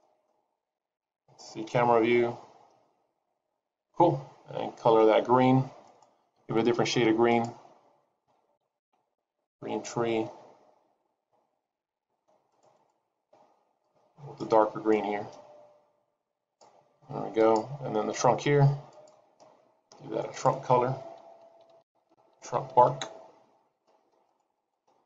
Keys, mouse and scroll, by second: 0.0 middle click, 0.5-1.2 scroll down 4, 1.6 KP_0, 2.7 scroll down 1, 5.9 click, 7.9 click, 9.3 e, 11.0 e, 13.8 click, 17.4 click, 19.3 click, 24.5 click.